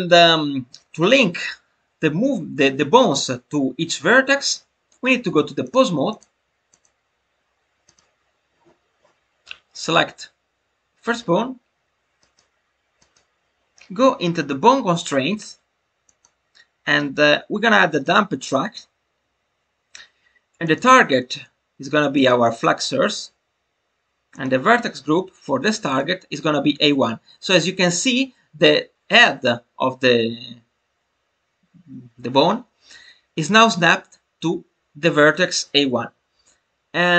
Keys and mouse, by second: 5.5 click, 6.2-6.8 drag, 7.8 click, 12.2 click, 12.9 click, 16.1-24.3 drag, 24.4-25.9 drag.